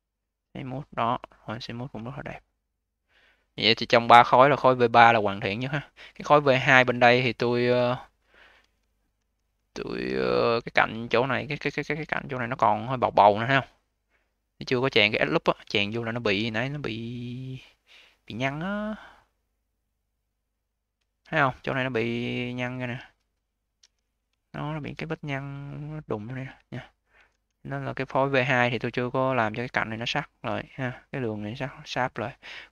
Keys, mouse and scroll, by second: 0.8-1.5 scroll down 7, 1.5 click, 2.0-2.7 alt+drag, 2.7-3.2 alt+middle drag, 3.2-3.8 alt+drag, 3.8-4.2 alt+middle drag, 4.2-5.7 alt+drag, 5.7-6.3 alt+middle drag, 6.3 click, 7.1 1, 7.5-9.0 scroll up 5, 9.0 v, 9.4 v, 9.9 q, 10.5-11.3 scroll up 2, 11.3 scroll down 2, 11.9 q, 12.4-15.5 alt+drag, 15.7 alt+middle click, 16.1 a, 20.9-23.7 scroll up 10, 23.7 v, 23.9 scroll down 4, 24.2-26.9 alt+drag, 26.9-27.3 scroll down 2, 27.3 ctrl+z, 28.0-29.5 scroll down 5, 29.5-31.7 alt+middle drag, 31.7-32.4 scroll down 5, 32.4 alt+middle click.